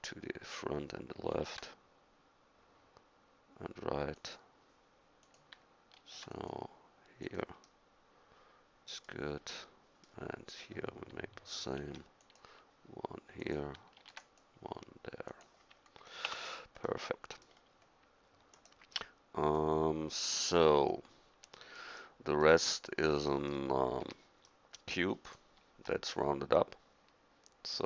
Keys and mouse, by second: 1.3 ctrl+r, 6.0 ctrl+r, 11.8 ctrl+r, 14.0 ctrl+r, 16.3 Tab, 18.5-19.5 drag, 19.5-20.9 middle drag, 21.6 drag, 24.0 a, 25.3-27.1 middle drag, 27.2 middle click.